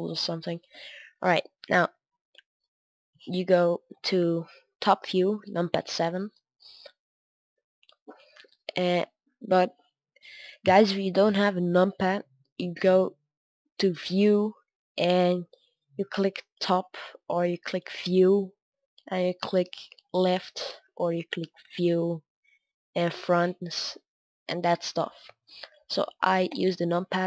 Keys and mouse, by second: 3.8 KP_7, 5.1 middle click, 8.3-16.5 middle drag, 23.0-25.1 drag, 25.1 middle click, 26.4 KP_7.